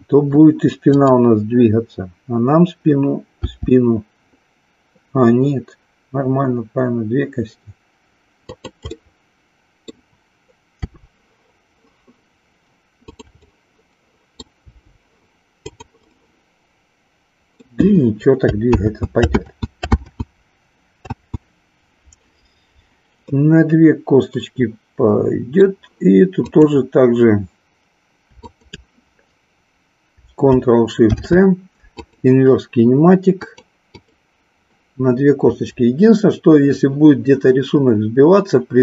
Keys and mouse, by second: 1.0-2.5 drag, 3.3 g, 9.0-10.0 middle drag, 10.8 r, 13.2 click, 13.5-14.6 middle drag, 14.7 r, 15.7 click, 16.2-17.6 middle drag, 18.7 ctrl+z, 19.5 ctrl+z, 21.1 ctrl+z, 23.2-25.7 middle drag, 26.5-27.8 drag, 28.5-29.7 shift+drag, 31.0 ctrl+shift+c, 33.5 click.